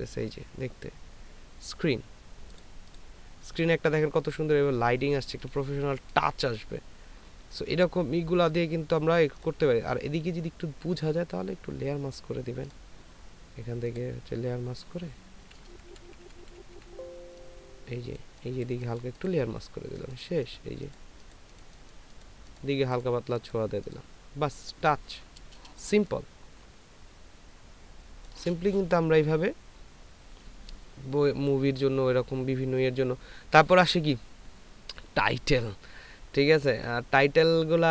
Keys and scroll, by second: 15.9-16.7 typing, 26.2 ctrl+space.